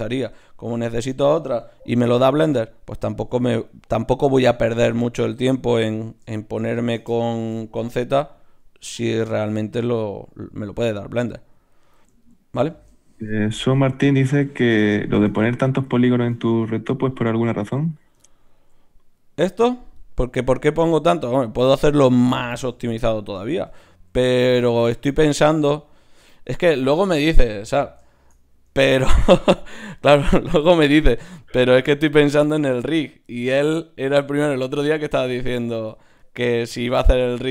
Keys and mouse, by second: 3.1 ctrl+r, 5.3 ctrl+Tab, 7.6 x, 9.6 ctrl+Tab, 13.1 shift+q, 16.1 shift+q, 21.2-22.9 right drag, 22.9-29.5 middle drag, 34.7 Tab, 35.5-37.5 drag.